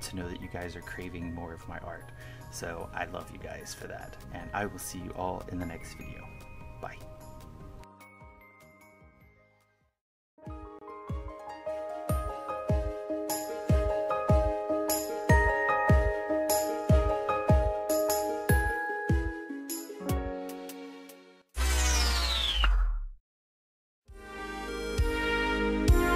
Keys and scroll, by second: 0.0-0.7 typing, 2.8 1, 3.4 KP_Subtract, 3.9 KP_Subtract, 4.3 KP_Add, 6.0 1, 6.3 KP_Subtract, 7.1 KP_Subtract, 7.3 1, 8.3 KP_Add, 8.6 1, 9.0 KP_Subtract, 9.1 KP_Add, 9.5 KP_Subtract.